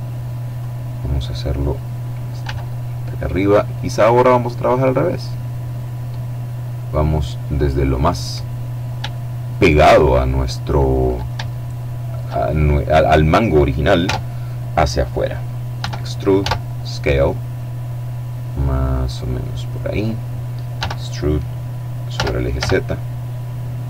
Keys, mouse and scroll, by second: 1.5 s, 6.7 click, 7.5-8.4 scroll up 1, 8.6-10.6 shift+middle drag, 10.7-11.7 scroll up 2, 13.1 Tab, 14.9 e, 15.5 s, 18.7 click, 19.8 e, 21.2 z.